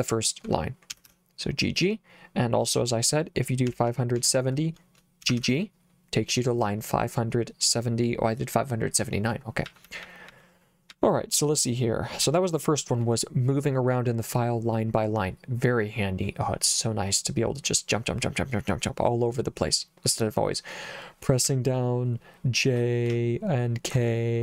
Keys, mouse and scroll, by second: 1.0 g, 1.1 g, 3.5-5.4 typing, 9.7-11.0 typing, 12.3 j, 21.5 j, 23.2 k.